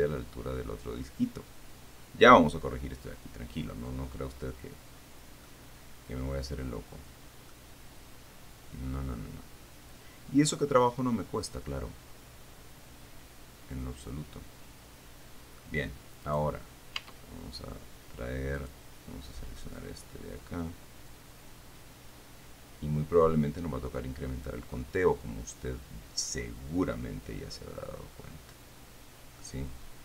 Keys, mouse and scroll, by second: 5.9-6.4 scroll up 1, 6.4-7.1 scroll up 1, 7.7 middle click, 13.6-16.0 right drag, 16.5 middle click, 16.7 right click, 17.4 Tab, 18.8 middle click, 20.0-24.9 drag, 25.0-29.9 middle drag.